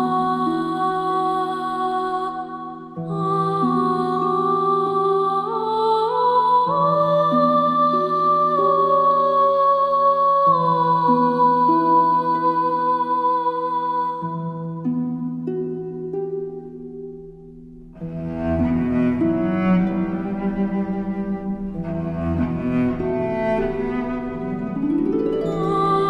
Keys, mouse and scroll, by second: 15.7 scroll up 1, 16.6 click, 16.9 space, 17.0 click, 18.9 space, 19.0 click, 19.9 space, 20.0 click, 22.3 space, 22.3 click.